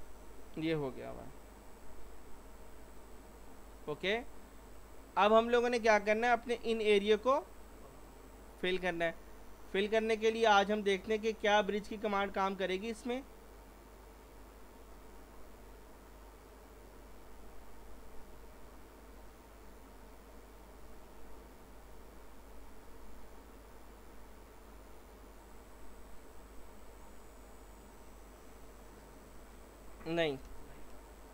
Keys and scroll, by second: 1.1 p, 30.5 ctrl+z.